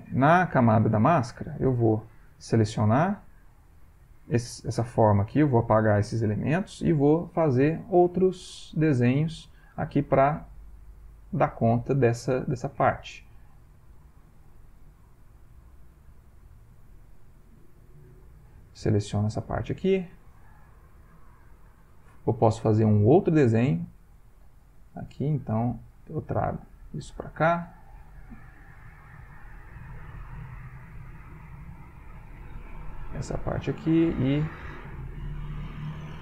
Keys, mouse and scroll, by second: 0.7 click, 2.0 click, 3.0 click, 3.6 click, 4.7 click, 6.3 Delete, 11.3 click, 12.8 click, 14.0 click, 15.7 click, 16.8 click, 18.1 click, 21.6 click, 22.9 click, 24.3 click, 25.8 click, 26.8 click, 28.8 click, 29.9 click, 30.7 click, 31.7 click, 32.2 click, 33.3 click.